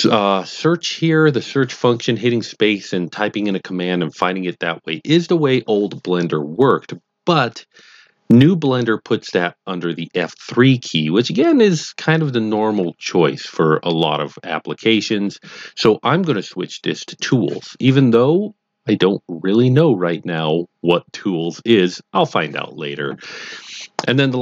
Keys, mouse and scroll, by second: 17.1 click.